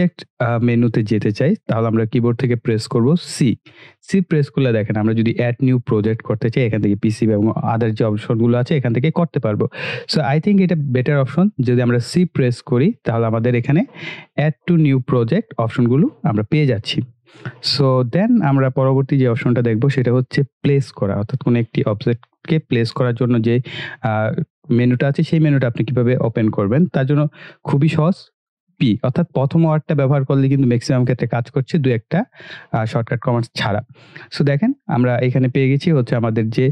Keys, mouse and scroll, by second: 3.3 c, 10.1 click, 12.2 c, 16.6 click, 19.1 typing, 21.9 click.